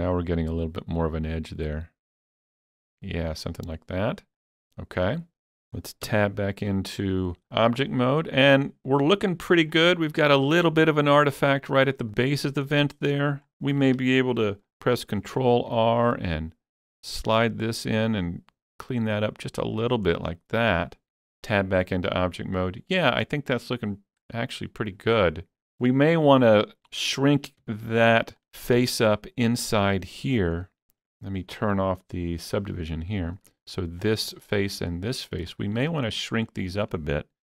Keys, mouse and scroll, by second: 3.3 click, 4.4-6.8 middle drag, 6.1 Tab, 6.8-7.6 scroll down 2, 7.6-7.9 scroll down 3, 7.9-10.1 middle drag, 12.1 Tab, 12.1 middle click, 12.1 scroll up 1, 12.8-15.0 shift+middle drag, 15.0 ctrl+r, 15.5 click, 19.8 click, 20.2-21.8 middle drag, 21.6 Tab, 21.8 scroll down 3, 22.3-26.8 middle drag, 27.7 Tab, 27.7 middle click, 27.7 scroll down 1, 28.1 scroll up 4, 28.8 shift+middle click, 28.8 3, 29.5 click, 32.5 click, 34.6 scroll up 1, 35.3 shift+middle click, 36.5 shift+middle click.